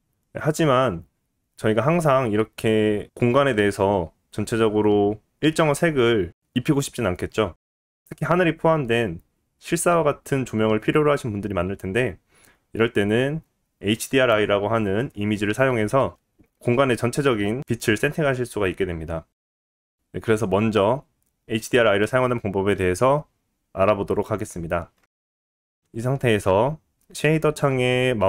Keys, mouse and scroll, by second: 2.5-5.7 scroll down 1.